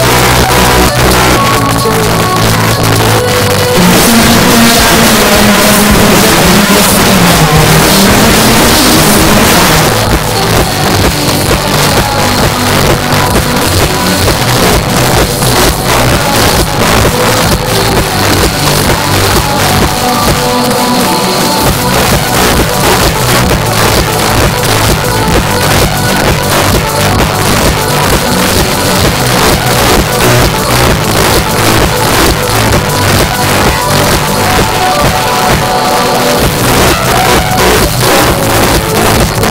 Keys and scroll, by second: 9.7 Page_Down.